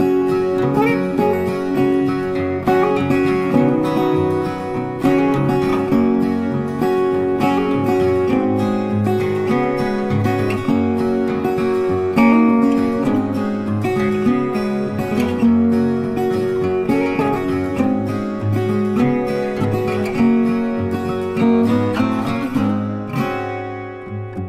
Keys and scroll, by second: 4.8 ctrl+z, 16.4 ctrl+z.